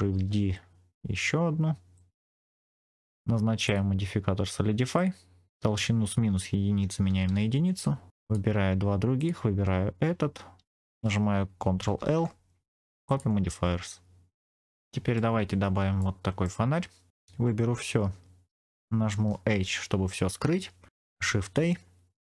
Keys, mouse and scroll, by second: 0.0 shift+d, 1.8 click, 2.4 middle click, 3.5-4.9 drag, 5.5-7.2 drag, 8.1 shift+click, 9.1 shift+click, 11.9 ctrl+l, 14.0-14.4 scroll up 2, 14.6 middle click, 15.9 middle click, 16.7 scroll up 1, 17.6 a, 19.4 h, 21.3 shift+a.